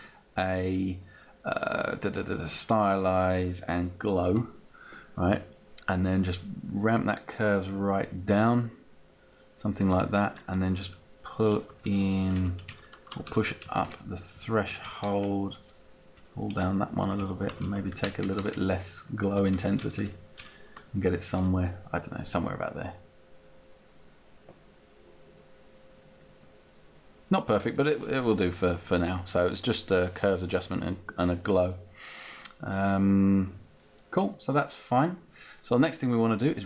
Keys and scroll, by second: 11.9 shift+Down, 12.2 shift+Up, 13.5 Up, 13.7 Down, 14.8 Up, 16.0 Down, 16.6 Up, 17.2 Down, 18.0 shift+Down, 19.8 shift+Up, 20.9 Up.